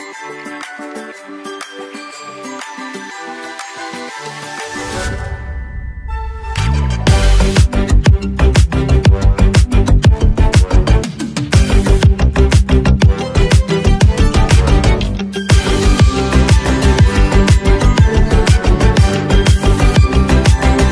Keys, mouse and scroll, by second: 1.3 click, 9.2 click, 12.3 x, 13.7 click, 19.8-20.4 alt+scroll up 1, 20.5 space, 20.6 click.